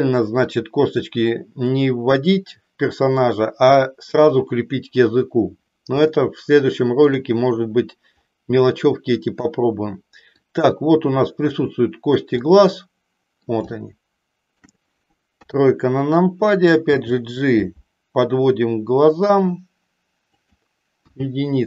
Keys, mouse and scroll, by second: 6.2-7.3 shift+middle drag, 10.4-11.5 drag, 12.4-13.5 middle drag, 13.7 shift+middle click, 15.4 KP_3, 16.9 g, 20.4 click, 21.0 KP_1.